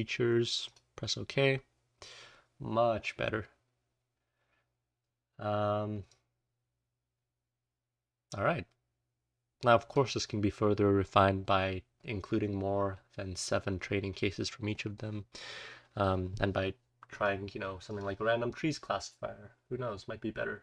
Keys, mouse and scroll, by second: 1.4-2.3 scroll up 1, 2.3-3.4 scroll up 1, 3.4-4.9 scroll down 1, 4.9-6.0 scroll up 1, 6.0-9.9 drag, 6.0-7.0 scroll up 1, 7.0-9.3 scroll up 1, 9.3-9.9 scroll up 1, 9.9-12.3 scroll up 1, 12.3-15.2 scroll up 1, 15.2-17.1 scroll up 1.